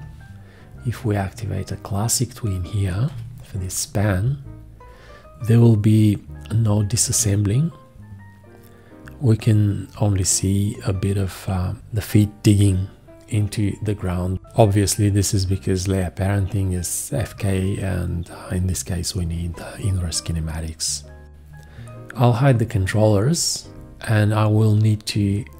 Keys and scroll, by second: 3.0 4, 22.4 F1, 23.7 v.